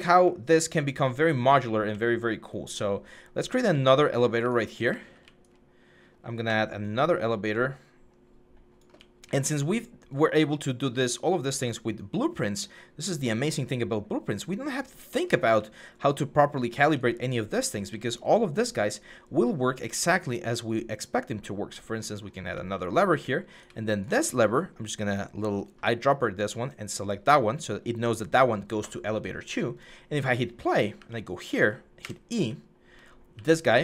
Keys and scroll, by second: 3.4-5.0 typing, 8.7 typing, 15.2-17.7 typing, 22.0-23.4 typing, 30.6-33.8 typing.